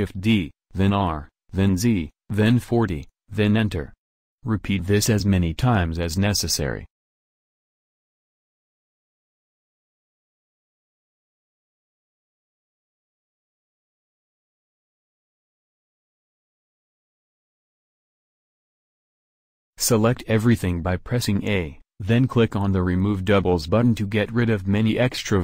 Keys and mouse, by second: 2.7 a, 3.0 a, 3.3 shift+d, 7.6 a, 7.8 a, 8.4 shift+d, 11.0 shift+d, 15.1 shift+d, 17.8 a, 18.0 a, 18.6-21.3 drag, 22.9-25.4 drag.